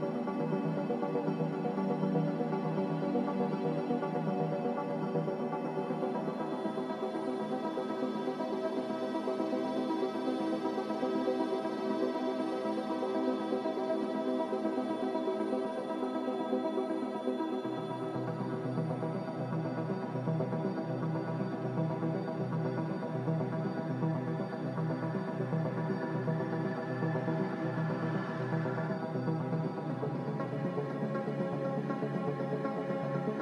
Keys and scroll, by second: 0.3 Escape, 2.3 ctrl+z, 4.4-5.9 typing, 8.4 g, 9.1 z, 20.2 ctrl+z, 24.2 a.